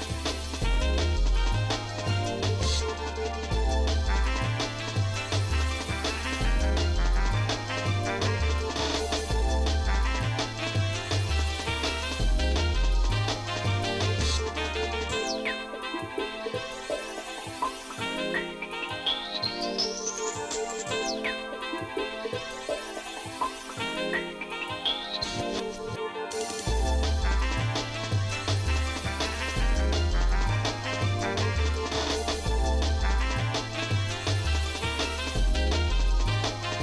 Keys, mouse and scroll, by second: 1.2-5.3 shift+middle drag, 5.8 shift+middle click, 7.1 Tab, 7.7 shift+middle click, 10.0 click, 10.7 scroll down 2, 11.3 shift+middle click, 12.2 click, 12.7 shift+middle click, 14.6-16.5 drag, 16.9 shift+middle click, 17.4 scroll down 1, 17.4 scroll up 1, 17.7 scroll down 1, 17.8 middle click, 18.3 shift+middle click, 19.1 middle click, 19.6 shift+middle click, 20.5 middle click, 21.1 shift+middle click, 21.5 shift+middle click, 22.2 shift+middle click, 22.7 shift+middle click, 23.1 shift+middle click, 23.8 shift+middle click, 24.6 shift+middle click, 25.6 shift+middle click, 26.2 shift+middle click, 28.2-33.6 drag, 34.8 click.